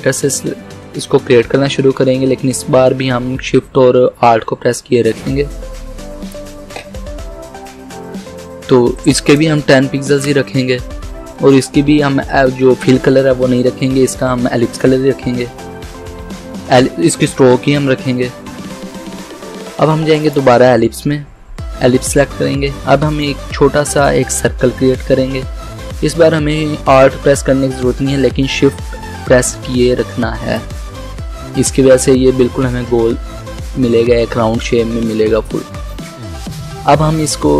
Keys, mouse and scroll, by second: 0.2-8.9 drag, 9.2 click, 9.6-10.5 typing, 20.3 click, 23.3-33.1 drag.